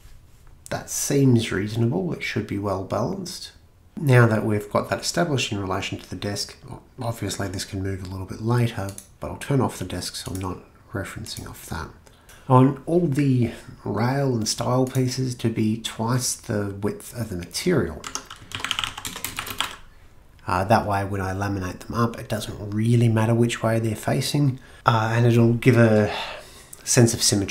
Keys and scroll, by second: 3.9 Escape, 12.2 Escape, 12.2 typing, 18.1 Tab, 18.3-19.4 typing, 19.6 Return.